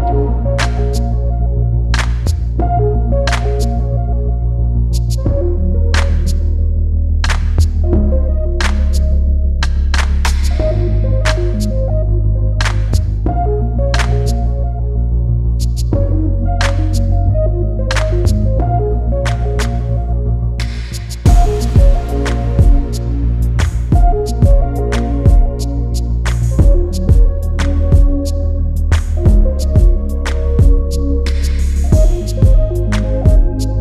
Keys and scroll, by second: 15.7 [.